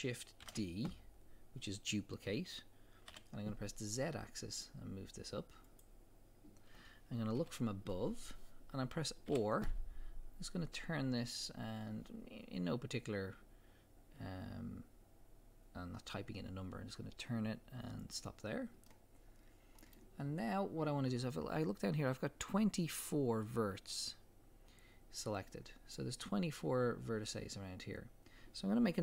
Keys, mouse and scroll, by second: 0.4 shift+d, 5.8 click, 7.4 KP_7, 9.3 click, 9.3 r, 13.3 click, 18.1 click, 18.9-29.0 middle drag, 20.3-20.8 scroll down 2, 20.8-22.8 scroll down 1, 22.8-24.3 scroll down 1.